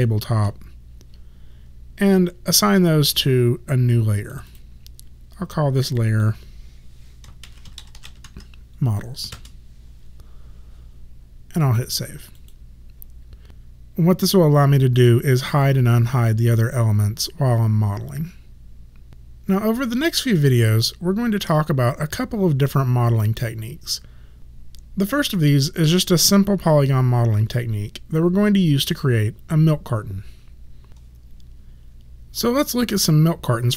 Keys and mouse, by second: 2.5 click, 7.3-8.8 typing, 9.3 Return, 11.7 click, 15.5 click.